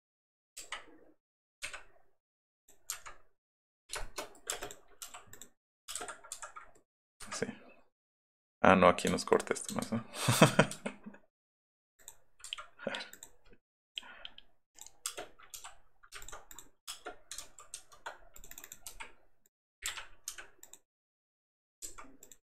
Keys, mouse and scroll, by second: 2.6 click, 3.8 click, 4.0 shift+middle click, 4.5 space, 5.9 space, 6.0 Escape, 6.3 Escape, 6.6 middle click, 7.2 Escape, 9.8 ctrl+z, 10.5 middle click, 12.0 click, 12.5 Escape, 13.1 click, 15.1 space, 16.2 alt+click, 16.5 click, 16.9 space, 17.4 ctrl+z, 18.4 click, 18.5 click, 18.7 click, 18.9 l, 19.4 click, 19.8 middle click, 19.9 Up, 20.3 Left, 20.6 click, 21.7 click, 21.9 Up, 22.2 click.